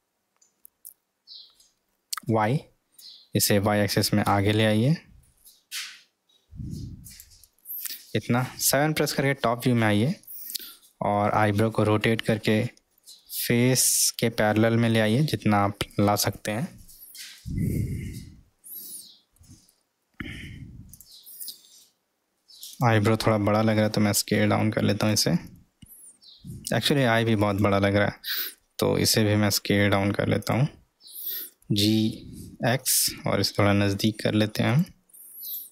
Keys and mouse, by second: 10.4-11.1 middle drag, 12.8 r, 16.9-18.3 middle drag, 19.0 middle click, 22.7 click, 23.7 s, 26.2-26.7 middle drag, 27.5 click, 29.2 s, 31.5 g, 35.5 click.